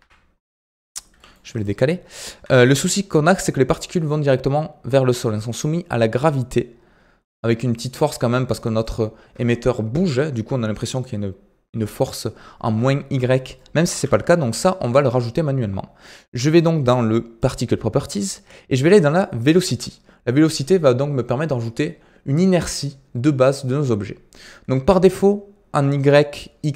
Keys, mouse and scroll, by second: 1.0 g, 1.7-2.0 scroll up 9, 2.5-2.9 shift+middle drag, 2.9-6.0 scroll down 4, 6.2-9.2 drag, 13.5-14.4 shift+middle drag, 14.4 click, 17.3 click, 19.3-19.9 drag, 19.9 scroll down 2.